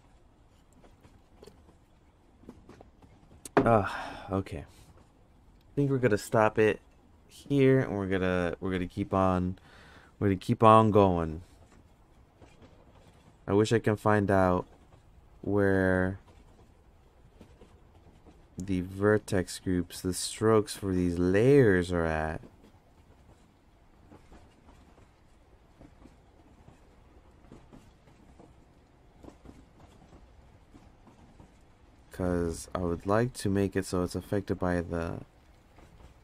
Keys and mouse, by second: 16.3 click, 17.0 click, 17.9 click, 23.2 click, 23.6 click, 24.1 click, 26.9 click, 27.4 click, 29.3 click, 29.9 drag, 30.4 click, 30.7 click, 31.8 click, 32.3 click, 33.1 click, 33.5 click, 34.7 click.